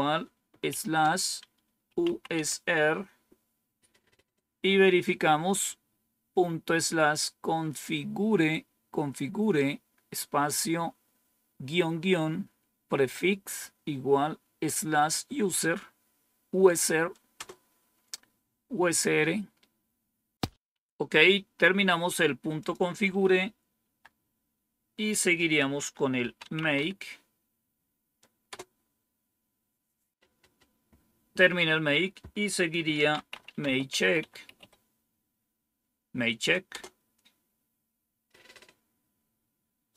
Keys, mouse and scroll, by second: 0.6 typing, 2.3 typing, 17.3 Return, 22.5 click, 23.4 click, 23.7 Down, 25.9-27.2 typing, 28.4 Return, 32.6-35.0 typing, 36.6 Return.